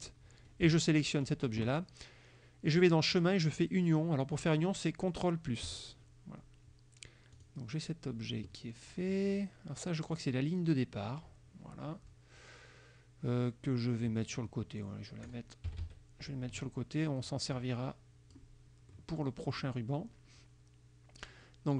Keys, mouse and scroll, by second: 0.0 shift+click, 2.8 click, 5.7 click, 7.4 click, 10.3-15.6 drag, 15.8 KP_Subtract, 17.3-18.6 drag, 19.0 middle click, 19.6 middle click.